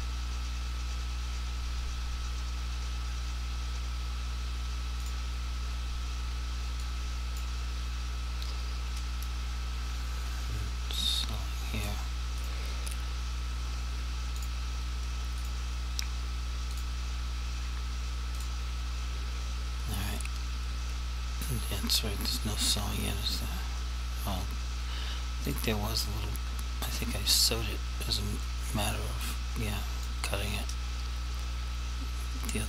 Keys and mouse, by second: 5.1 shift+click, 7.0 click, 11.4 click, 12.5 right click, 18.5 shift+click, 25.6 click, 28.6 click.